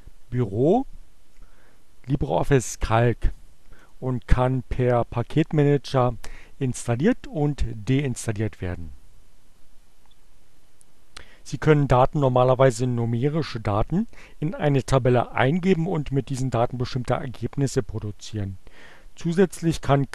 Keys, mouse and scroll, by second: 2.4-4.1 drag.